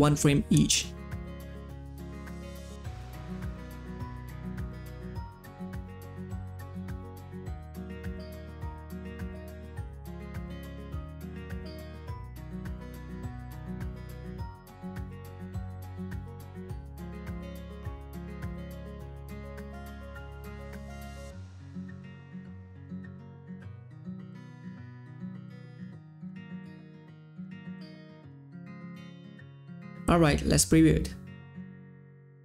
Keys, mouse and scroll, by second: 0.0-4.7 drag, 5.7 click, 6.0 Page_Down, 6.8 Page_Down, 7.7-11.9 drag, 11.9 Page_Down, 12.4-16.4 drag, 16.4 Page_Down, 16.8-24.2 drag, 27.8-29.4 drag, 31.8 space.